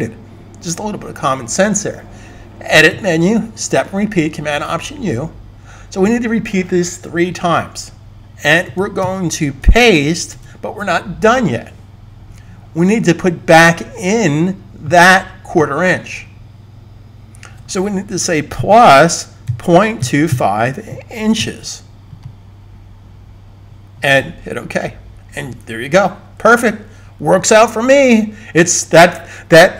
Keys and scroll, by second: 10.2 super+v, 19.2-21.2 typing.